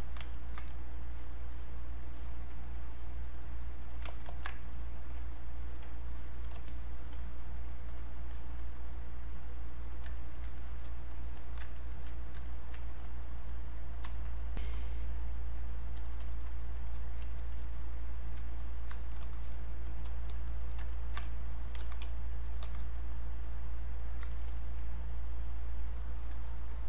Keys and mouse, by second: 0.0 alt+click, 0.3 ctrl+right click, 1.1 alt+click, 2.9 alt+click, 4.0 ctrl+z, 4.6 alt+click, 5.6 alt+click, 6.7 shift+click, 10.2 ctrl+right click, 10.6 click, 11.4 alt+click, 11.7 ctrl+right click, 12.4 ctrl+right click, 13.0-16.4 alt+drag, 17.5 alt+click, 18.2 alt+click, 20.5 alt+click, 20.9 ctrl+right click, 21.8 ctrl+d, 22.6 ctrl+d, 23.0-26.8 drag.